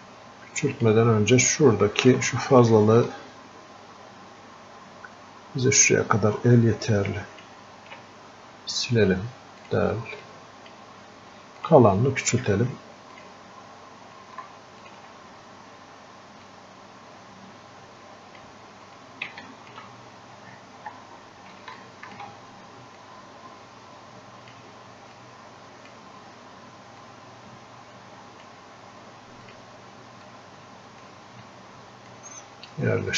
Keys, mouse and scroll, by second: 10.6-33.1 drag.